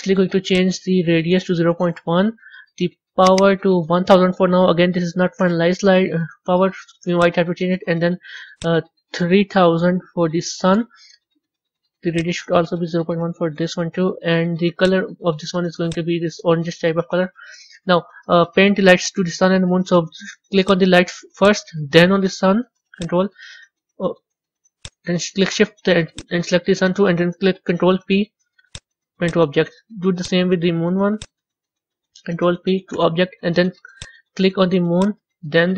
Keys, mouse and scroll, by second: 0.4-3.2 drag, 3.6-4.6 drag, 4.6 KP_0, 4.7 KP_0, 7.0 click, 8.4-10.0 drag, 10.0 KP_0, 10.2 KP_0, 12.0-15.0 drag, 20.5 click, 21.3 click, 22.8 ctrl+click, 24.7 click, 26.0 shift+click, 27.6 ctrl+p, 29.1 click, 30.1 click, 31.0 shift+click, 32.2 ctrl+p, 33.8 click, 34.9 click.